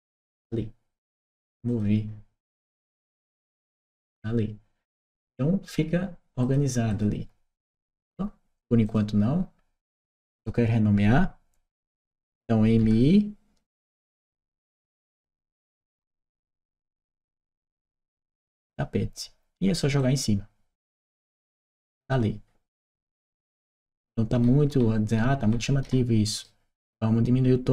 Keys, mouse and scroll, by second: 1.4 click, 2.3 click, 6.2 click, 6.7 click, 8.6 click, 9.8 click, 14.2 shift+i, 15.6-17.4 typing, 17.6 click, 19.8 click, 22.6-26.2 right drag, 27.5 click.